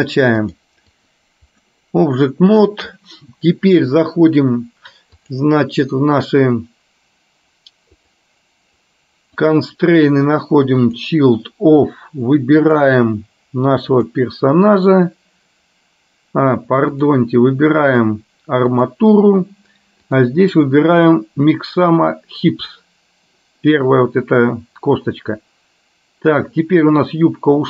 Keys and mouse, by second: 0.6 click, 1.1 click, 8.1 click, 9.7-11.2 drag, 12.8 click, 17.9-19.1 drag, 20.1-22.8 drag.